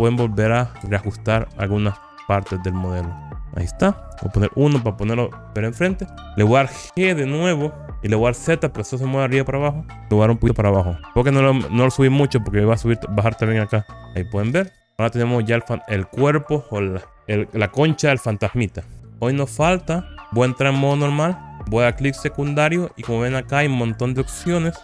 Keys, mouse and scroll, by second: 0.9 shift+click, 2.1 shift+click, 2.7 middle click, 4.2 KP_1, 4.8 scroll down 1, 5.7-7.5 scroll down 1, 7.9 g, 9.9 z, 14.0 click, 14.8-16.6 middle drag, 14.8 click, 21.0 Tab, 22.3-23.9 right drag, 24.0 click.